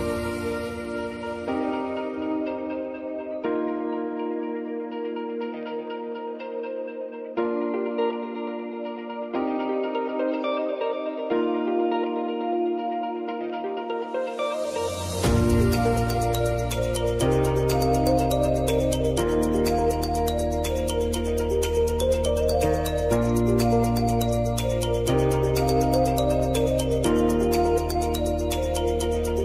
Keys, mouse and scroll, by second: 0.7 s, 1.4-3.5 drag, 3.8-14.0 drag, 16.7 ctrl+t, 18.2 click, 20.1 shift+u, 20.6 p, 22.1-23.6 typing, 24.0 Return, 26.4 shift+5, 27.4-28.9 typing, 29.2 ctrl+a.